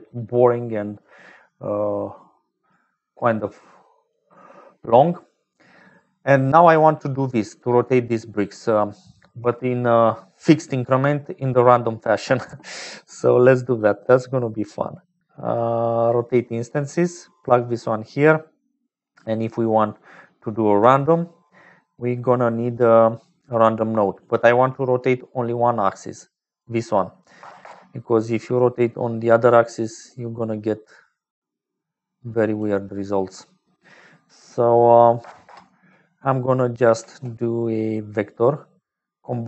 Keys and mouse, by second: 6.3 click, 12.4 shift+a, 18.4 click, 19.1 middle click, 22.4 middle click, 24.2-26.1 drag, 27.9 click, 28.9-33.0 drag, 33.1-35.8 drag, 36.9 shift+a.